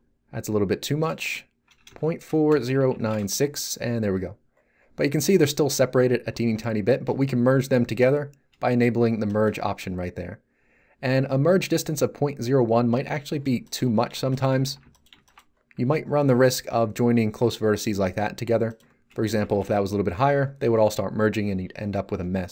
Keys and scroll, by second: 1.8 BackSpace, 2.4 0, 2.7 9, 2.9 6, 3.1 Return, 14.6 z, 19.2 Delete, 19.4 1, 19.6 Return.